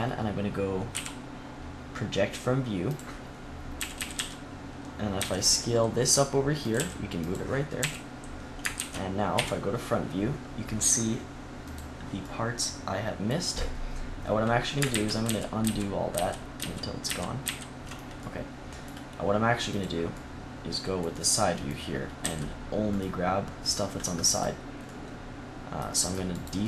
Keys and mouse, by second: 0.8 u, 3.7 a, 3.9 a, 4.0 s, 5.1 s, 6.6 click, 6.7 g, 7.7 a, 8.7 ctrl+z, 9.2 KP_1, 12.2-14.8 drag, 14.8 ctrl+z, 15.2 ctrl+z, 15.5 ctrl+z, 16.0 ctrl+z, 16.5 ctrl+z, 17.0 ctrl+z, 17.3 ctrl+z, 18.2-19.6 middle drag, 19.6-21.3 drag, 21.3-23.6 middle drag, 22.1 c.